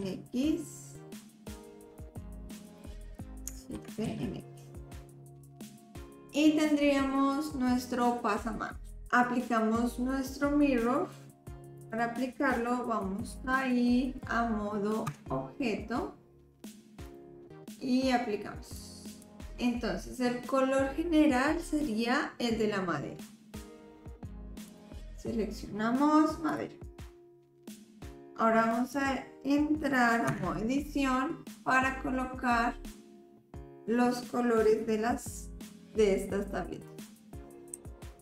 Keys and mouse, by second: 3.8 shift+d, 6.1 click, 7.5-8.9 drag, 11.8 click, 15.1 Tab, 17.1-19.3 drag, 23.5-26.6 drag, 27.8 click, 29.0 click, 30.3 Tab, 31.9-33.0 middle drag, 37.8 l.